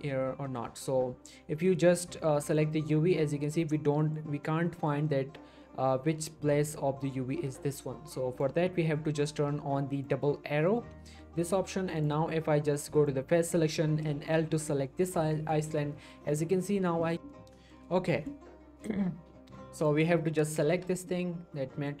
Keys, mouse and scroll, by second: 2.4 click, 4.0 middle click, 4.1 scroll up 1, 4.4-5.1 middle drag, 13.5 click, 14.5 l, 15.2 scroll down 1, 15.3 middle click, 16.3 scroll up 1, 17.0 middle click, 17.3-17.9 middle drag, 19.8 click, 20.7 l, 21.1 middle click, 21.4-21.8 scroll up 2, 21.5-22.0 middle click.